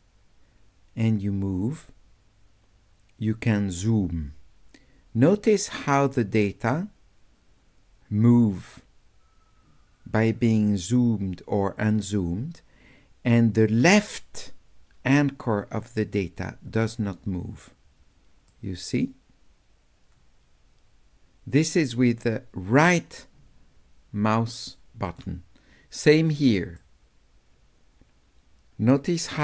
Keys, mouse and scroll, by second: 13.8 middle click, 18.5-25.2 right drag, 26.8-29.4 right drag.